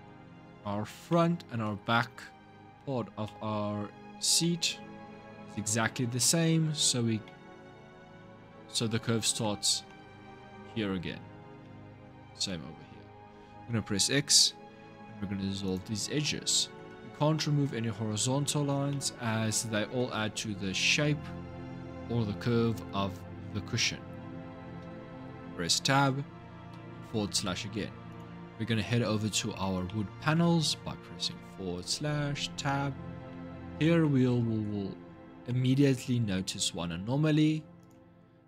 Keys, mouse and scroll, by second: 0.9-14.2 shift+middle drag, 14.2 x, 16.0-22.5 middle drag, 24.6 Tab, 26.5 KP_Divide, 27.9 click, 29.6-31.1 middle drag, 31.1 KP_Divide, 31.9 Tab, 32.5-33.1 scroll up 6, 33.1-34.7 middle drag, 34.7-35.3 scroll up 6, 35.3-36.6 middle drag, 36.6-37.4 scroll up 1, 37.6 click.